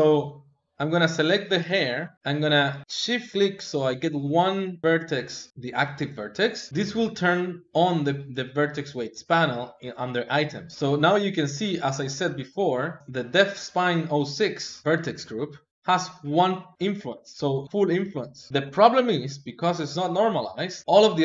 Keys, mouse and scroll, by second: 0.8 click, 1.5 l, 2.1 shift+click, 2.7 shift+click, 3.4-5.5 middle drag, 11.2-13.0 drag.